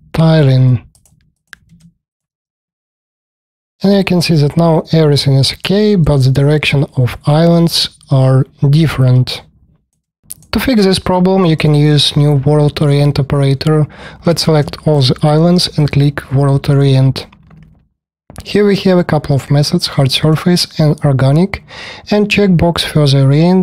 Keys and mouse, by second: 1.2 click, 2.7-5.6 alt+drag, 5.9-9.2 alt+drag, 9.2 alt+click, 9.6 alt+click, 11.4 click, 14.1 space, 14.2 KP_1, 17.3-18.8 drag.